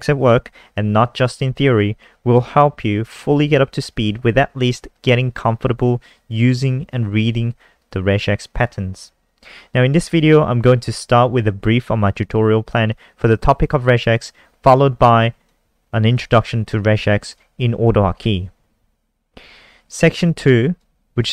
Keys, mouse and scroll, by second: 15.4 click.